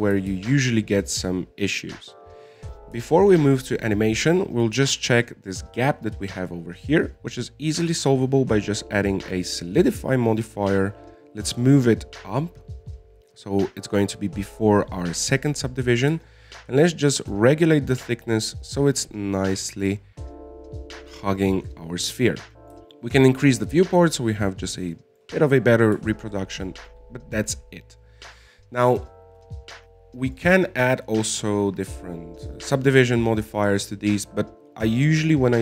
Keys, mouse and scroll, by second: 1.6 alt+a, 4.5 alt+a, 4.7 middle click, 5.3 scroll up 5, 5.6-7.7 middle drag, 7.7 click, 9.4-12.6 drag, 13.5-16.6 drag, 17.4-20.6 drag, 22.8-24.5 drag, 25.2 middle click, 25.6 scroll down 1, 25.7-26.3 scroll up 4, 26.3 middle click, 26.6-26.9 scroll down 3, 26.9 middle click, 27.8 scroll up 1, 28.0-30.2 middle drag, 30.2-31.6 scroll down 1, 31.6 right click, 35.3-35.6 scroll down 1.